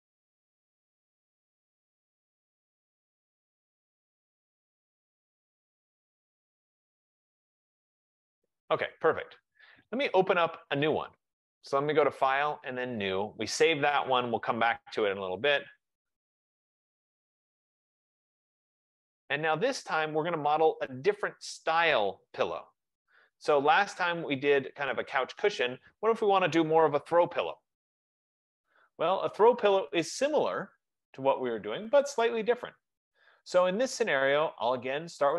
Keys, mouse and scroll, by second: 0.1-0.6 typing, 1.3 Return, 1.7 typing, 3.2 click, 3.3 click, 4.2 click, 4.8-8.0 typing, 9.6-10.4 typing, 11.1 click, 13.8 click, 17.6 click, 25.4-30.5 drag, 32.2 click.